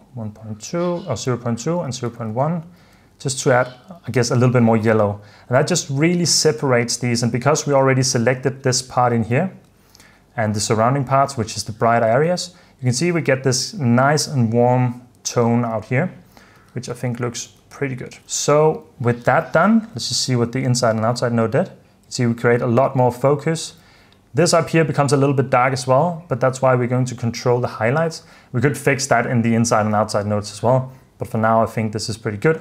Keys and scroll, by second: 1.1-2.3 typing, 3.1 super+f, 3.6 super+d, 4.8 super+d, 9.5 h, 12.2 h, 15.6 super+d, 16.7 h, 17.5 h, 18.2 super+f, 18.3 super+s, 21.1 super+d, 21.6 super+d, 22.4 super+d, 23.5 super+d.